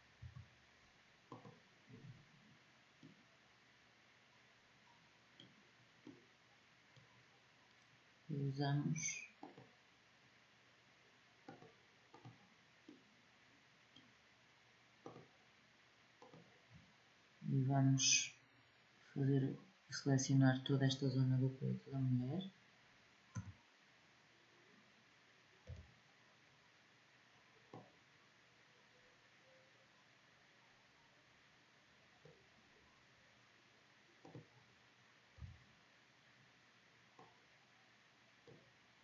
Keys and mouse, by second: 5.5 middle click, 9.2-13.0 drag, 13.0 middle click, 14.8-15.1 drag, 16.0 click, 16.4-20.3 middle drag, 23.1 a, 25.4 b, 34.0-36.3 drag, 35.1 b, 38.8 b.